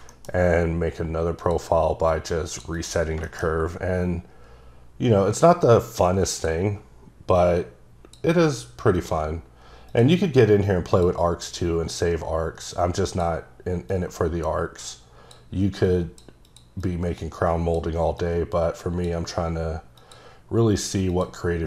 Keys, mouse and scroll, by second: 1.4 click, 2.1 click, 2.2-2.9 typing, 2.8 double click, 3.2 shift+middle click, 3.5-6.1 scroll up 5, 6.3 click, 7.4 click, 9.0 click, 9.9 click, 10.9 click, 12.0 click, 13.9 click, 15.9 click, 16.5 click, 16.8 click, 18.2 click, 20.0 click, 21.1 click.